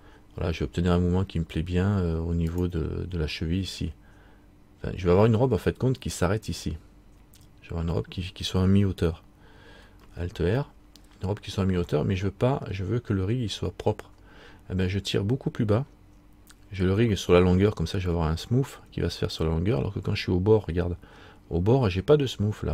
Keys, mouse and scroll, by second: 10.8 middle click, 12.1 middle click, 19.4 middle click, 21.3 scroll up 1.